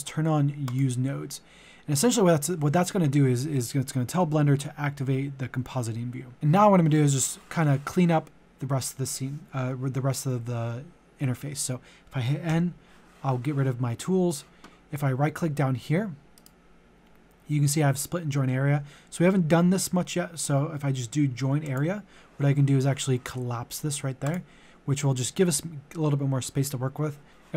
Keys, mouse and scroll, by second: 12.5 n, 16.4 right click, 21.6-27.5 drag.